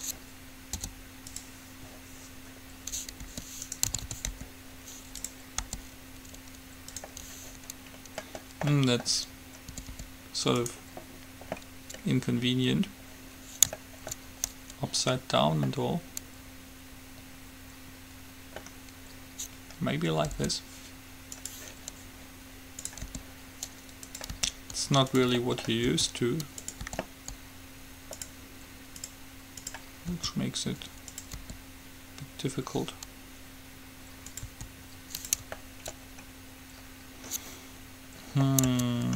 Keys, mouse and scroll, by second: 0.0-1.2 drag, 0.9 u, 3.4 r, 4.1 a, 4.2 a, 4.5 r, 5.7 g, 8.2-10.3 middle drag, 9.9 r, 14.5-18.3 middle drag, 20.7 u, 23.1 click, 23.2 r, 24.5 click, 24.5 g, 26.2 s, 27.0 g, 29.2-31.7 drag, 30.2 s, 31.7 r, 34.7 s, 37.5-38.8 middle drag, 38.9 Tab.